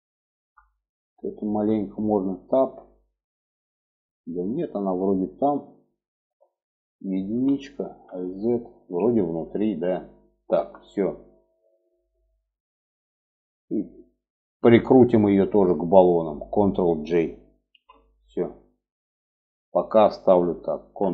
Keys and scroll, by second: 1.7 Tab, 4.9 alt+z, 5.8 alt+z, 6.7 1, 7.4 alt+z, 8.1 alt+z, 9.9 Tab, 17.1 ctrl+j, 20.2 ctrl+s.